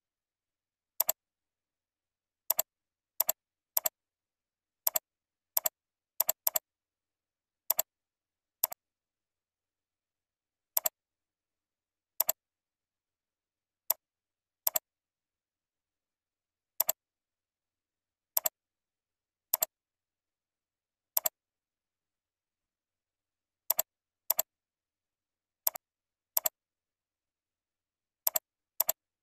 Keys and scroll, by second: 3.1 ctrl+c, 4.1 ctrl+v, 7.4 ctrl+c, 9.3 ctrl+v, 18.7 ctrl+v, 20.4 ctrl+x, 21.8 ctrl+v.